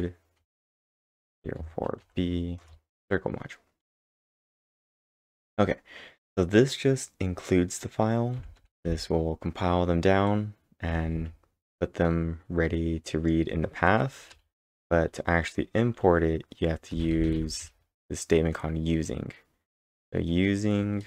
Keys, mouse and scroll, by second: 0.0-2.5 typing, 2.6 Return, 8.4 Return, 8.6-9.4 typing, 14.1-14.8 typing, 16.7-17.9 typing.